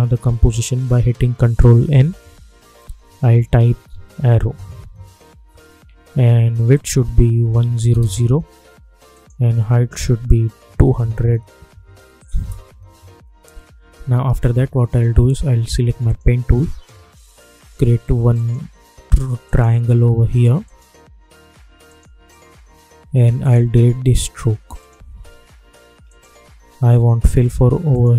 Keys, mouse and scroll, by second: 1.8 ctrl+n, 3.2-5.2 typing, 6.7 click, 9.1 click, 12.3 Return, 16.0 click, 18.3 click, 19.4 shift+click, 20.6 shift+click, 21.8 shift+click, 23.4-28.1 drag.